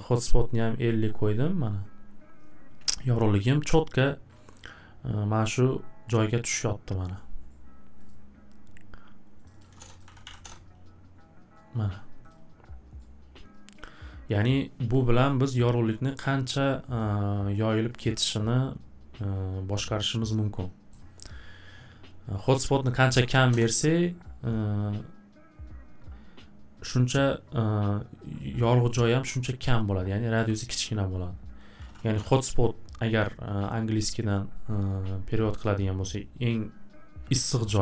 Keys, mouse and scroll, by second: 0.2 click, 1.0 click, 1.4 click, 8.1 click, 9.4-10.7 typing, 9.4 click, 9.6 click, 10.0 click, 12.3 click, 12.6 typing, 20.9 right click, 22.8 click, 22.9 click, 23.0 2, 23.5 Return, 30.4 click, 31.5-32.3 typing.